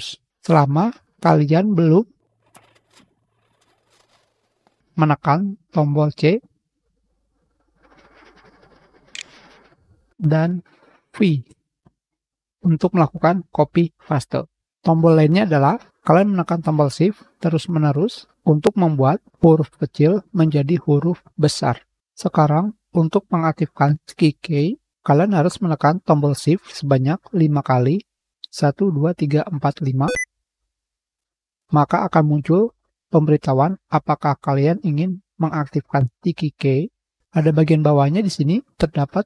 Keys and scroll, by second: 7.9 ctrl+j, 7.9 ctrl+v, 8.5 ctrl+c, 10.1 ctrl+v, 22.0 Return.